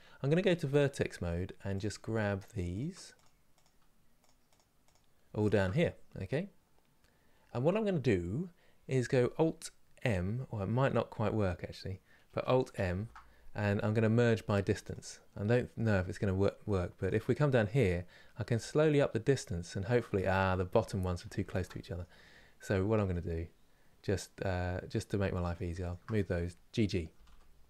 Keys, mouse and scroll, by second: 2.4 shift+click, 5.5-8.5 middle drag, 9.3-18.2 middle drag, 18.2-19.9 drag, 19.9-21.1 middle drag, 21.1 ctrl+z, 21.5-25.2 middle drag, 25.2 click, 26.8 g.